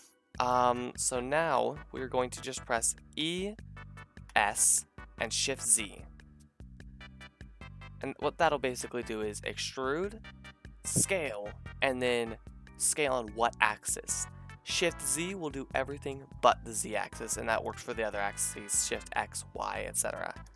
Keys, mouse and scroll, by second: 3.2 e, 17.7-20.5 middle drag, 20.2 s.